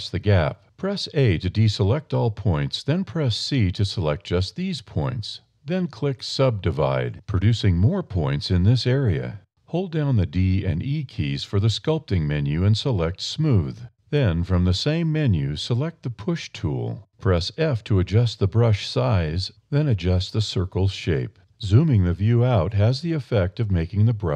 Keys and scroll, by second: 0.7 c, 1.3 a, 2.1 c, 9.7 a, 10.7 d, 10.9 e, 13.3 e, 14.6 a, 15.1 e, 17.0 d, 17.2 e, 18.5 f, 19.4 e, 22.3 e.